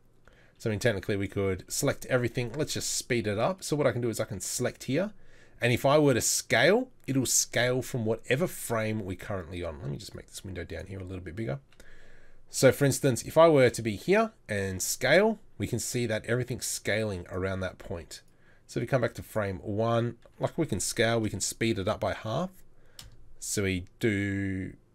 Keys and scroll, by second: 1.7 a, 7.8 a, 14.6 s, 20.2 s.